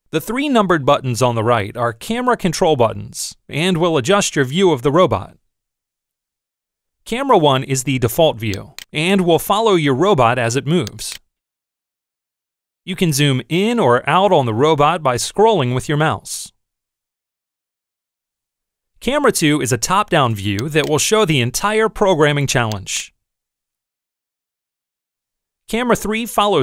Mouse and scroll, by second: 8.6 click, 10.7 click, 14.0-19.0 middle drag, 20.6 click, 22.7 click.